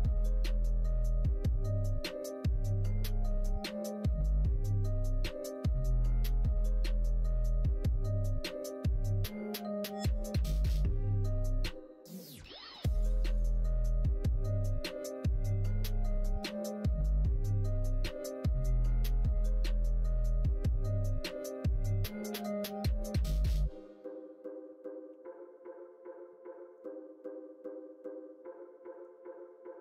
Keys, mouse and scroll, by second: 0.0 click, 0.6 middle click, 1.3 middle click, 1.9 middle click, 3.1 middle click, 4.2 middle click, 5.4 shift+click, 6.2 middle click, 7.4-9.4 middle drag, 9.8-12.4 middle drag, 12.9-14.4 middle drag, 15.4 middle click, 16.2 middle click, 17.1 click, 17.7 shift+click, 18.2 middle click, 21.0 click, 21.4 middle click, 22.1 KP_1, 22.5 KP_3, 23.6 KP_1, 25.0 3, 26.7-29.1 drag.